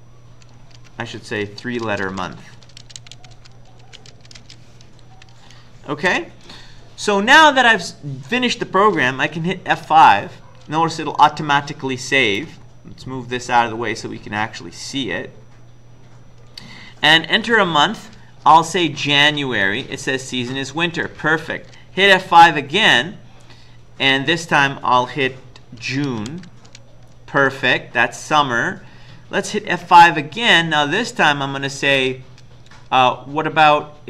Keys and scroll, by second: 0.3 Left, 0.3 Left, 0.6 Left, 1.4-4.6 typing, 5.1 End, 5.9-6.6 typing, 9.8 F5, 18.3-19.4 typing, 21.0 Return, 22.3 F5, 25.6-26.8 typing, 28.4 Return, 29.8 F5.